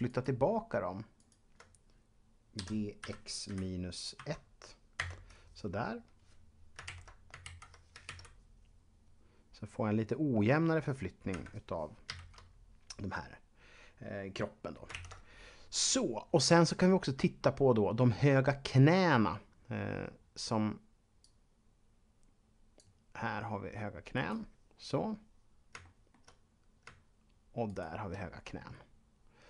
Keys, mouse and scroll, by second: 0.1 shift+right click, 1.2 shift+right click, 2.6-3.0 typing, 5.0 Return, 7.7 Left, 8.1 alt+a, 11.3 Escape, 12.3 Left, 14.9 ctrl+Up, 21.2 click, 24.1 right click, 25.1 scroll up 1, 26.2 middle click, 26.4-26.8 scroll up 1, 27.7 right click, 28.7-29.3 scroll down 1, 29.3-29.4 scroll down 1.